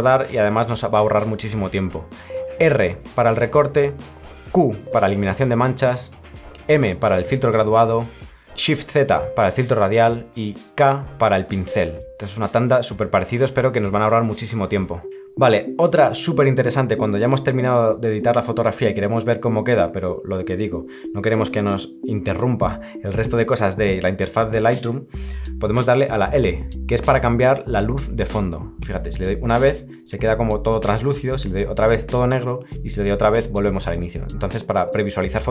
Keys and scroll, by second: 28.8 l, 31.1 l, 33.9 l.